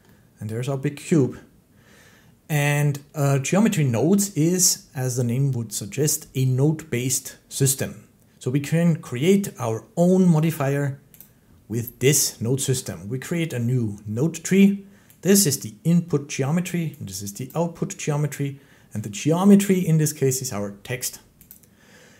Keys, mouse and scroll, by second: 1.0 middle click, 11.1 click, 13.2 middle click, 13.2 click, 15.4 click, 17.3 middle click, 21.4 click.